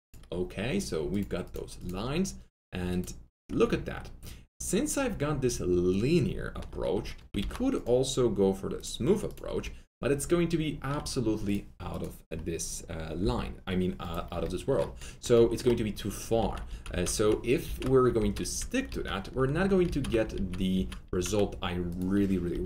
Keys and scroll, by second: 6.9 alt+1, 13.1 Delete, 16.3 ctrl+alt+z, 17.6 ctrl+z, 18.1 ctrl+z, 22.5 F3, 22.6 F3.